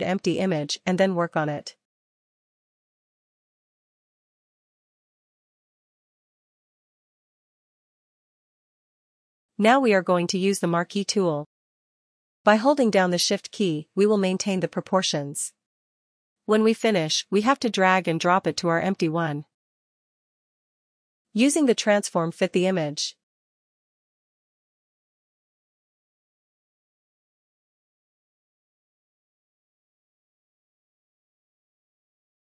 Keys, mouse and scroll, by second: 3.9 click, 6.8 click, 9.3 click, 9.9 click, 16.2 shift+click, 18.5 click, 22.7 click, 23.0 click, 26.9 ctrl+-, 26.9 click, 27.3 ctrl+-, 29.1 ctrl+t.